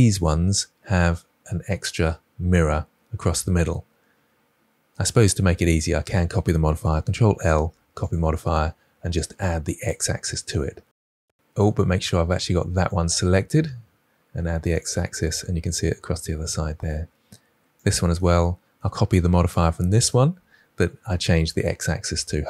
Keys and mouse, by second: 0.2-4.7 drag, 6.8 ctrl+l, 9.7 click, 10.6 click, 11.3 ctrl+z, 12.7 click, 14.7 click, 18.3-19.1 drag, 19.9 click.